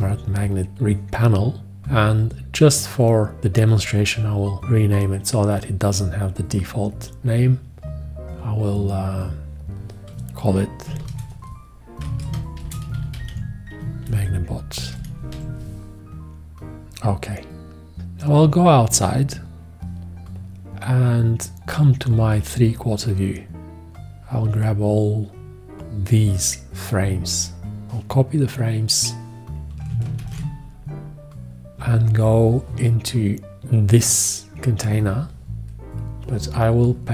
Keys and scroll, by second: 11.0 shift+r, 12.1-15.3 typing, 30.2 ctrl+alt+c.